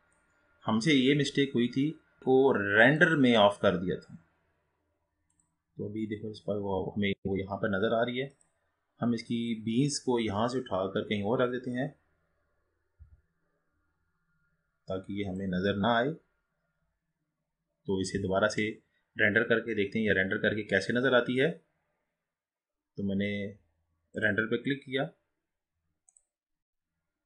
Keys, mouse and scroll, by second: 2.9-5.5 drag.